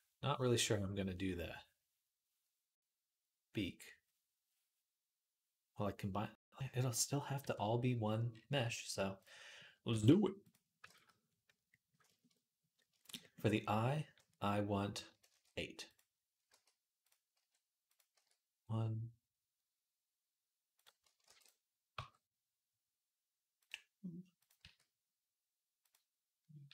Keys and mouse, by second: 7.2 KP_3, 7.8-12.7 middle drag, 9.9 g, 10.7 ctrl+z, 15.1 shift+d, 16.3 g, 17.1 g, 17.9 e, 21.0 ctrl+r, 21.7 g, 24.4 e, 26.5 e.